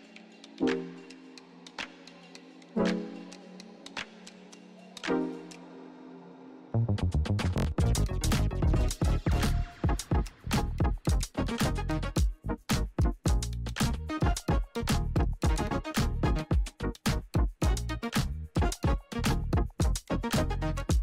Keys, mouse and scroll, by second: 1.3 Return, 2.2 click, 5.0 click, 8.2 click, 10.7 Return, 12.1-13.9 typing, 14.1 Return, 15.7 click, 17.6 ctrl+d, 20.3 click.